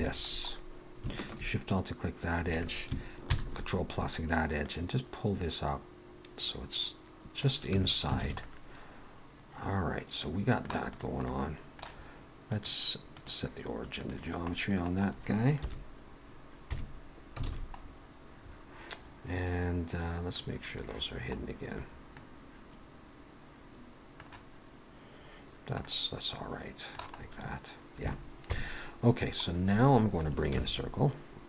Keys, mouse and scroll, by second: 0.0 alt+a, 0.3-1.0 scroll up 1, 1.0 scroll up 1, 1.2 alt+shift+click, 3.2 ctrl+KP_Add, 4.7 click, 7.8 Tab, 8.2 alt+a, 8.4 middle click, 10.9 click, 12.5 click, 14.6-15.1 scroll down 2, 15.7 KP_1, 16.6 KP_3, 17.4 alt+a, 17.8-18.3 scroll up 3, 18.4-19.7 scroll down 3, 19.7-20.4 scroll down 1, 20.4 click, 21.4-22.2 scroll up 3, 22.2 middle click, 25.8 middle click, 27.2-27.9 scroll up 1, 27.9 scroll up 2, 28.5 KP_3, 29.5-30.3 scroll down 3, 30.5 shift+a.